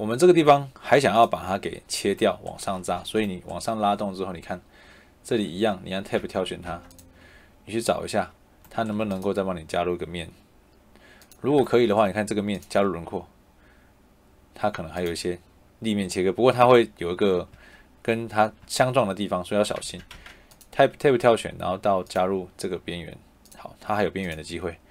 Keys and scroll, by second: 5.2 Escape, 6.0 Tab, 8.9 Escape, 17.4 Escape, 19.7 Tab.